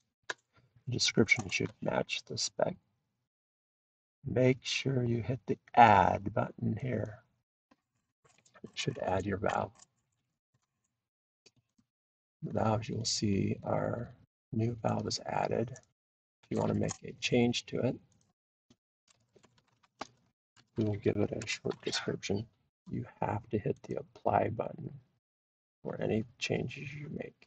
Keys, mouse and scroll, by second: 7.0 click, 10.2 click, 10.2-10.5 scroll, 11.8-14.3 scroll, 12.5 click, 15.0-15.8 click, 15.3 scroll down 5, 17.3 scroll down 1, 17.4 scroll, 17.5 scroll down 1, 18.0 scroll down 10, 18.2 scroll, 19.2-24.3 typing, 19.8-23.0 drag, 23.3 click, 23.6 click, 24.2 click, 24.4-25.5 drag, 25.5 typing, 26.1-27.4 drag.